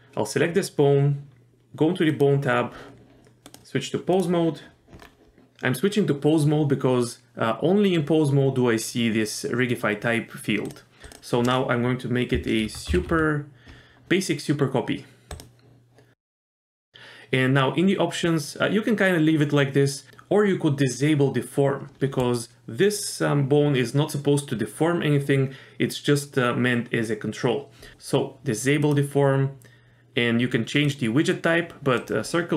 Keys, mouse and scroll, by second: 2.1 click, 3.5-4.2 drag, 5.0-5.3 scroll down 1, 11.1-15.4 drag, 16.2-16.9 scroll down 1, 27.9 click, 28.8 click, 30.9-32.0 drag.